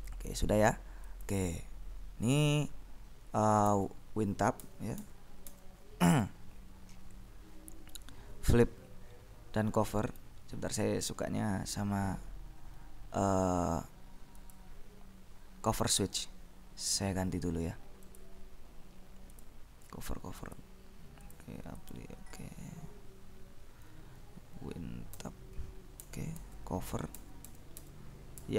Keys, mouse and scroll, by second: 1.3 click, 3.8 alt+Tab, 4.7 Tab, 6.1 Tab, 10.4 right click, 14.5 click, 18.2 click, 19.4 click, 20.6 click, 21.5-22.7 drag, 25.3 Tab, 26.0 Tab, 26.7 Tab, 27.2 Tab.